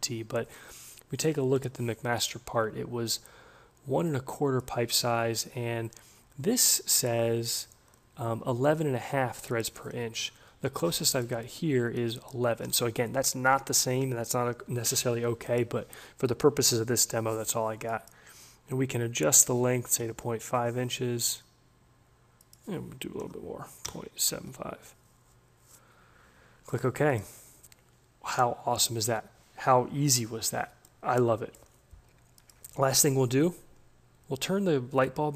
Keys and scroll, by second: 20.1 5, 23.8-24.9 typing.